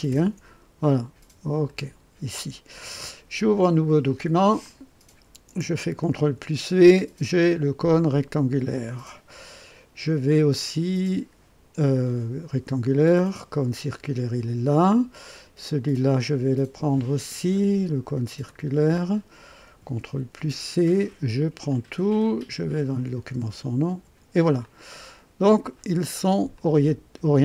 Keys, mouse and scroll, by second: 0.0 ctrl+c, 1.6 click, 4.6 click, 6.1 ctrl+v, 7.9-8.8 drag, 10.0-10.8 drag, 11.9-12.6 drag, 13.1 click, 18.4 click, 20.1 ctrl+c, 21.6 click, 22.7 click, 23.8 ctrl+v, 24.6-25.9 ctrl+drag, 26.5 click.